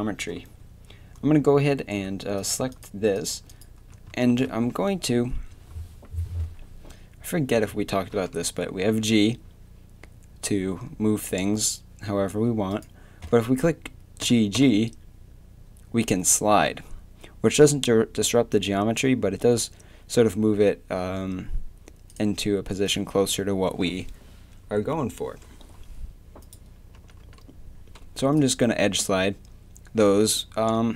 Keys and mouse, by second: 4.2 middle click, 8.1 g, 14.2 g, 17.6 g, 22.9-24.8 drag, 26.4-28.3 drag, 27.0 g.